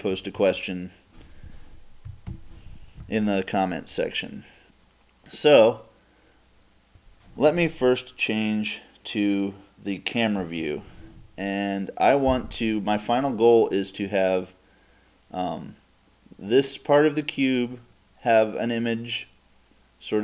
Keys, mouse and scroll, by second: 0.2 KP_2, 0.4 KP_2, 2.1 KP_6, 2.3 KP_6, 10.4 KP_0.